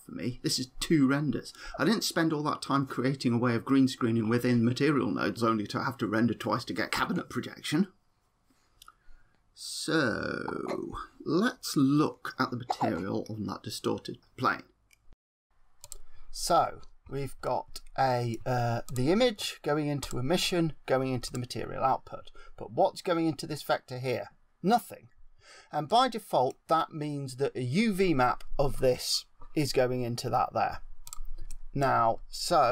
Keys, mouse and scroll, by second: 13.2 click, 15.9 click, 16.7-17.4 scroll up 12, 17.4 middle click, 18.8 click, 19.9 click, 21.2 click, 25.8 middle click, 31.0 click, 31.4 middle click.